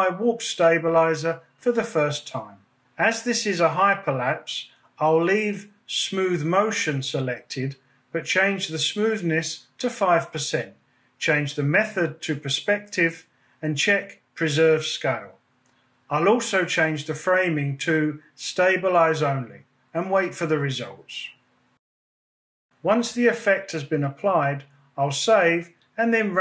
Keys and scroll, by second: 12.7 5, 25.7 super+s.